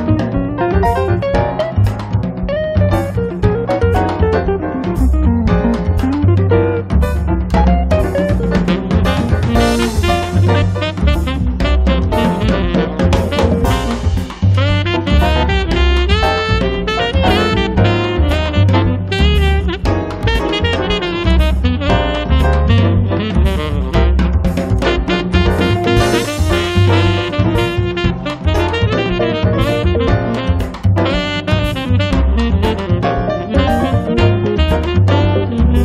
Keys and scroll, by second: 18.6 2, 31.5 space.